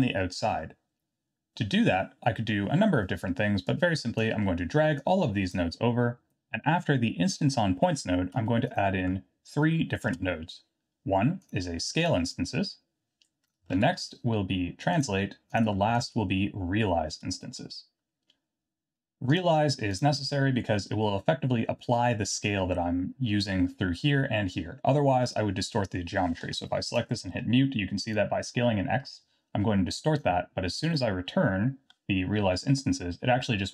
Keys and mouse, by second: 3.8 click, 5.1-5.6 drag, 10.1 shift+a, 12.3-13.6 drag, 13.7 shift+a, 15.8 shift+a, 26.7 click, 27.3 m, 28.2-30.2 drag, 30.8 click, 32.4 m.